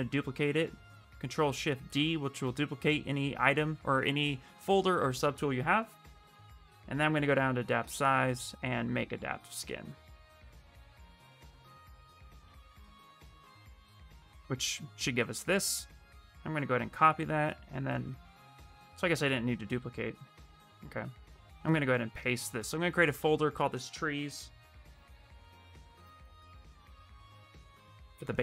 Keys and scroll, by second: 0.6 ctrl+shift+d, 2.4 space, 12.5 shift+f, 22.9 ctrl+f, 23.8-25.1 typing.